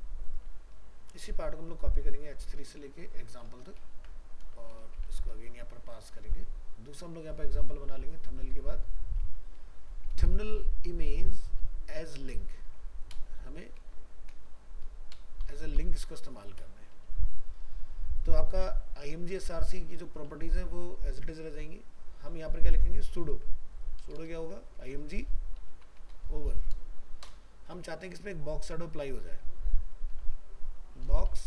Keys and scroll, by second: 3.9 ctrl+c, 5.1 ctrl+v, 6.2 ctrl+w, 23.4 ctrl+c, 24.4 ctrl+v.